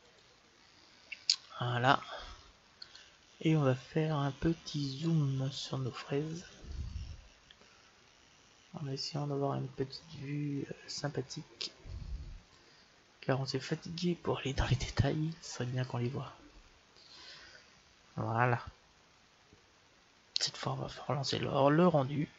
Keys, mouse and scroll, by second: 0.6 click, 1.2-2.6 middle drag, 2.6-4.5 right drag, 4.7-6.7 drag, 5.2-8.4 middle drag, 14.1-15.1 scroll up 1, 15.1-21.7 middle drag.